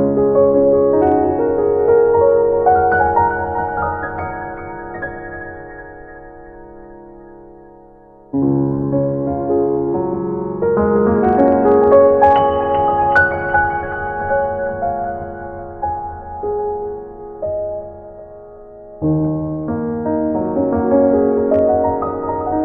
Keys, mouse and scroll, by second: 3.6 click, 14.0 click.